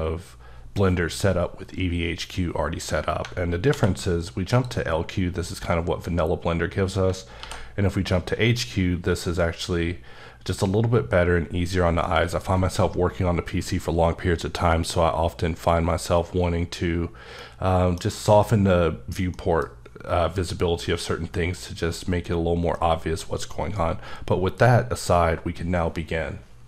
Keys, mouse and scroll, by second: 3.2-3.7 alt+scroll up 4, 3.7 alt+v, 4.5 click, 7.4 alt+v, 8.1 click, 11.5 scroll down 2, 12.0 middle click, 12.5 scroll down 2, 12.6 scroll up 1, 17.6 middle click, 19.3 middle click, 19.7 scroll up 1, 21.4-21.9 scroll down 2, 21.9-22.7 scroll up 1, 22.7 middle click.